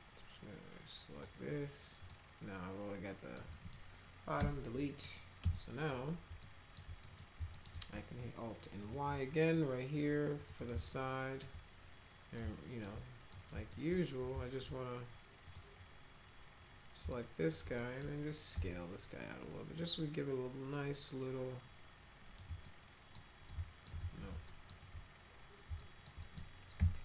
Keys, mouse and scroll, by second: 2.1-3.4 alt+middle drag, 3.5 middle click, 4.4 Delete, 4.8 middle click, 5.4 F3, 6.4 alt+middle click, 7.0 middle click, 7.5 alt+middle click, 8.8 alt+y, 10.3 click, 10.5 right click, 10.9 alt+middle click, 12.4 alt+middle click, 13.3 middle click, 13.7 alt+middle click, 15.5 click, 17.1 alt+middle click, 17.8 middle click, 18.5 r, 19.8-22.4 drag, 22.6 alt+middle click, 23.5 alt+middle click, 24.0 ctrl+z, 24.5 alt+middle click, 25.8 alt+middle click, 26.2 middle click, 26.8 p.